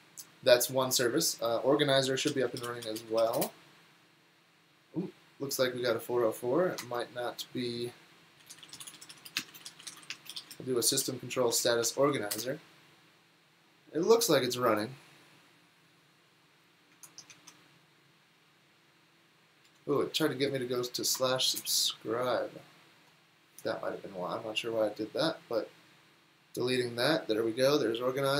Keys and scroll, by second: 2.0-3.9 typing, 8.2-12.8 typing, 17.0 super+Tab, 17.5 super+r, 19.7 super+l, 19.9 Right, 21.1 alt+BackSpace, 21.6 Return.